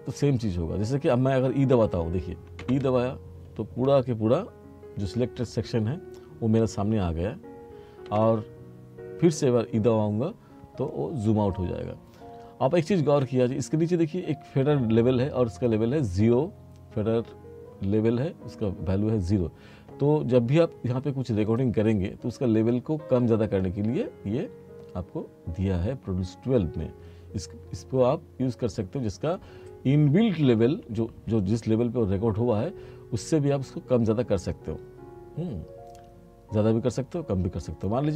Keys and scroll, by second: 2.7 e, 8.1 e.